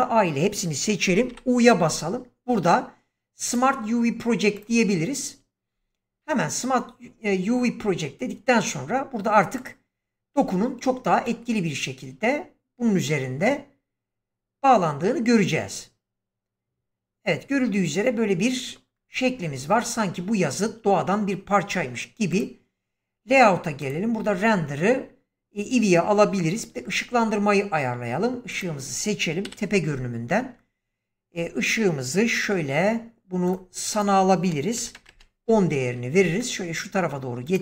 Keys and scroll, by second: 1.2 u, 10.3 Tab, 29.4 7, 34.7 typing, 35.0 Return, 36.1 g.